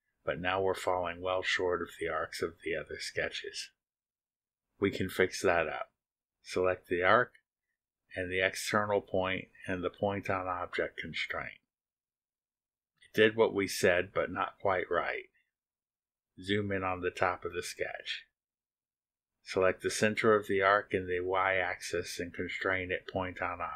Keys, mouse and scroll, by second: 5.8 click, 8.4 ctrl+click, 12.3 click, 19.5 click, 21.1 click, 21.6-21.9 scroll up 2, 23.5 click.